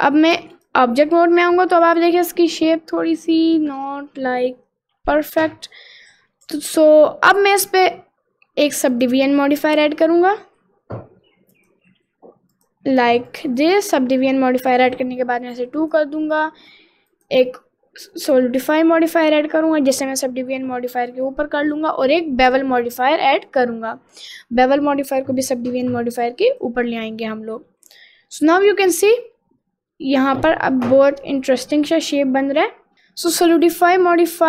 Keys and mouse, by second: 0.9 middle click, 1.8 click, 2.2 middle click, 3.7 middle click, 6.2 middle click, 6.8 middle click, 8.9 click, 9.9-11.7 drag, 12.6 click, 13.3 click, 13.6 click, 15.8 click, 17.3-18.4 drag, 19.7 click, 21.7 click, 22.2-23.5 drag, 25.4-26.7 drag, 27.3 middle click, 27.9 middle click, 28.8 middle click, 29.8 middle click, 30.8 middle click, 31.4 middle click, 32.0 middle click, 33.7-34.4 drag.